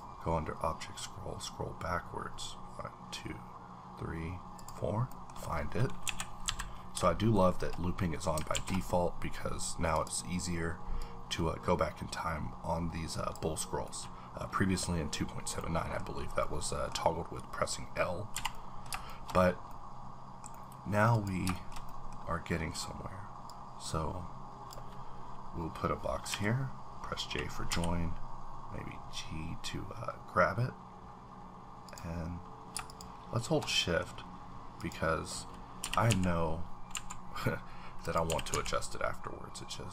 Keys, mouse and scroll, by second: 0.7-1.9 scroll down 1, 1.9-2.9 scroll down 2, 2.9-3.8 scroll down 1, 3.8-4.3 scroll down 1, 4.6 click, 5.1 middle click, 5.1 middle click, 6.0 KP_1, 6.4 KP_3, 7.3 shift+middle click, 7.6-8.2 shift+scroll up 1, 8.2 scroll down 1, 8.5 alt+w, 9.9 click, 11.0-14.7 drag, 13.9-19.1 middle drag, 18.3 h, 19.1 shift+middle click, 19.4 scroll down 1, 19.7 middle click, 20.5 double middle click, 21.1 click, 21.5 shift+middle click, 23.5-27.7 drag, 26.3 j, 27.7 g, 31.9 click, 32.9 shift+click, 33.9 middle click, 34.1-34.8 scroll up 2, 34.8 click, 35.4-35.8 scroll up 2, 35.8 g, 36.1 x, 36.9 y, 38.0 click, 38.3 g, 38.5 x.